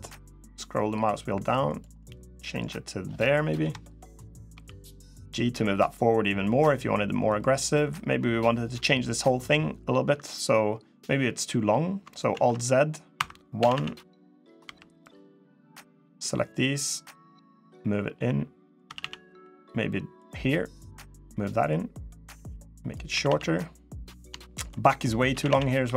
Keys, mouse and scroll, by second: 1.7 middle click, 3.3 KP_3, 4.3 g, 7.4-9.3 scroll down 1, 12.1 alt+z, 12.9 1, 13.3 a, 13.5 a, 14.4 b, 17.3 click, 18.6 a, 18.7 a, 19.0 b, 21.4 click, 22.9 a, 23.0 a, 24.1 shift+middle click, 24.5 scroll up 2, 25.1 a, 25.2 a, 25.6 b.